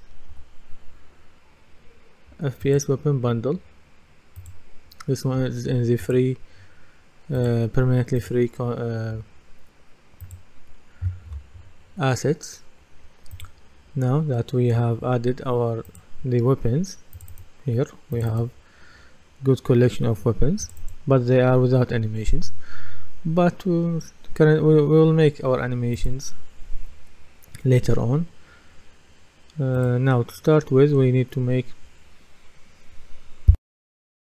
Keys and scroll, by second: 0.0-0.3 typing.